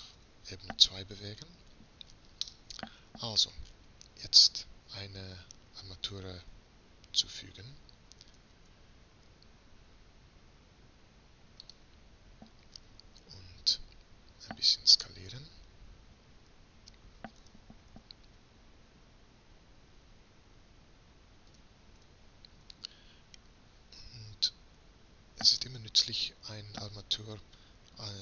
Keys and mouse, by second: 1.4-6.4 middle drag, 8.4 shift+a, 17.4 s, 25.5-27.4 drag.